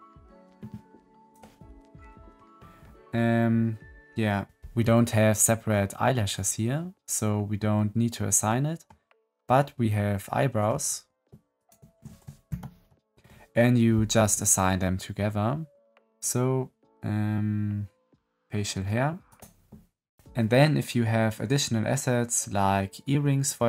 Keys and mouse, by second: 1.9 middle click, 8.4 middle click, 11.5 shift+click, 12.4 ctrl+l.